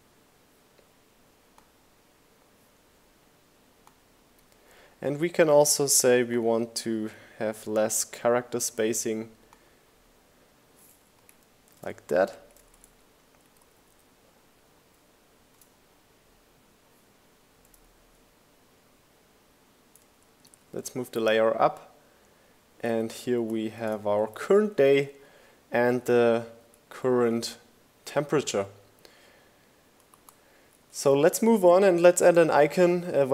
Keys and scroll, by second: 10.2 shift+Down, 11.7 shift+Up, 11.8 shift+Left, 13.8 shift+Up, 18.6 shift+Up, 19.3 shift+Left, 20.5 shift+Right, 20.8 shift+Up, 21.8 shift+Down, 22.2 Right, 23.2 Down, 24.7 Down, 28.3 Left, 29.0 Right.